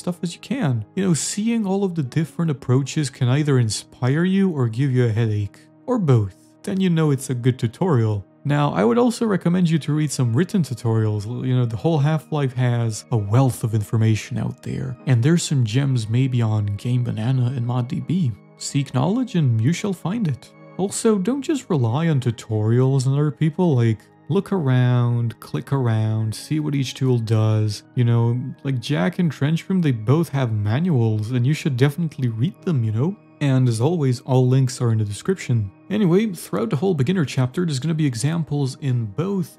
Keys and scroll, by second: 9.6-11.1 typing, 19.3 w, 20.9-25.2 typing, 21.6 Escape, 25.5 Escape, 27.1 s, 28.4 e, 30.9 Escape, 31.2-33.7 typing, 36.8 a, 38.0 Right, 38.3 Down, 38.6 Left, 39.0-39.5 typing.